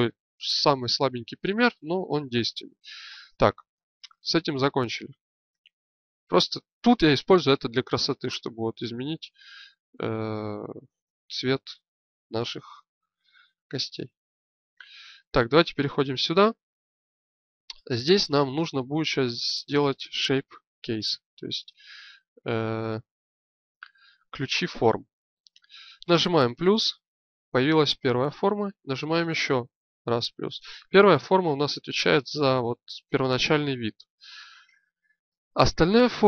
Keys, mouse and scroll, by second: 5.8-7.0 drag, 14.0-15.2 right drag, 20.5-31.6 drag.